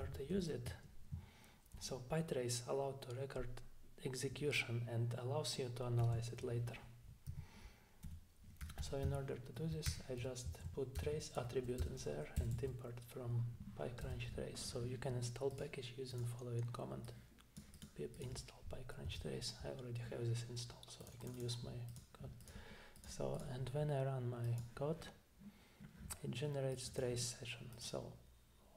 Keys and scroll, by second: 0.0 Return, 6.0 typing, 7.3-10.4 typing, 10.5 Left, 11.0 alt+Return, 11.8 Return, 12.4 Down, 12.5 Down, 14.0 Return.